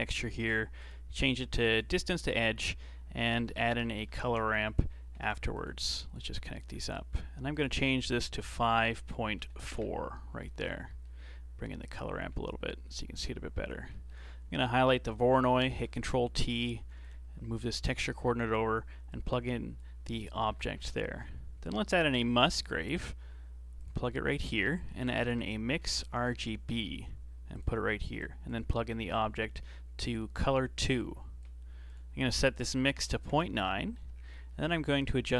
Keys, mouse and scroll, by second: 0.7-2.2 drag, 2.2 shift+a, 4.2 r, 5.9-7.5 alt+right drag, 7.5-10.5 drag, 10.5-10.9 scroll down 2, 10.9 middle click, 11.8-13.9 drag, 13.9 middle click, 14.6 click, 15.1 scroll down 2, 15.4-15.7 middle drag, 15.7 ctrl+t, 15.9 middle click, 16.5 click, 17.4 g, 19.1 click, 20.0 middle click, 20.4 shift+a, 24.3 shift+a, 28.2 click, 29.1 click, 30.4-34.1 drag, 34.1 scroll up 5, 34.5 middle click.